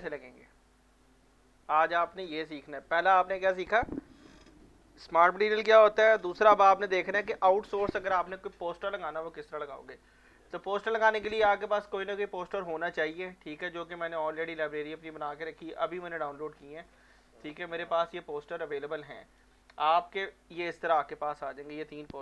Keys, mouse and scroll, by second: 10.6-11.0 scroll down 1, 11.3-14.2 right drag, 14.2 click, 17.3 click, 19.0 right click, 20.1-22.2 drag, 21.3-22.2 scroll.